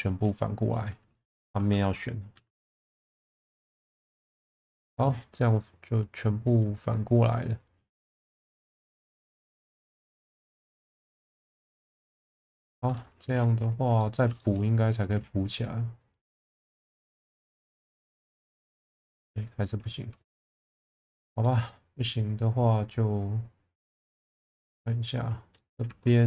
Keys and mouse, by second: 0.8 middle click, 1.3 3, 2.3 a, 2.8 middle click, 3.2 alt+n, 4.4 middle click, 4.7 Tab, 6.6-7.8 drag, 8.0 middle click, 8.5 2, 9.0 alt+click, 10.0 click, 10.8 middle click, 11.2 Tab, 12.0 2, 14.0 middle click, 14.4 shift+middle click, 16.1-18.3 drag, 19.0 middle click, 20.0 3, 21.1-21.4 middle drag, 21.7-24.7 middle drag, 25.6 middle click, 25.9 2.